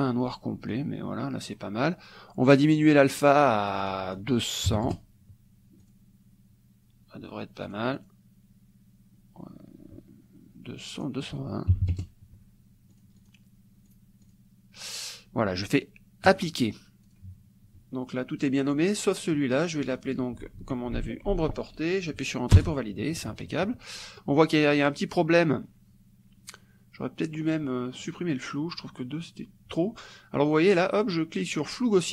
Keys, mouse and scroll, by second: 0.7 click, 3.7 click, 4.7 KP_0, 5.8 click, 7.7 click, 11.0 click, 11.7 KP_2, 12.3 KP_0, 13.1 click, 13.9 click, 14.3 click, 16.3 click, 17.1 click, 19.9 click, 21.0 ctrl+a, 21.3 ctrl+v, 22.6 Return, 28.0 click.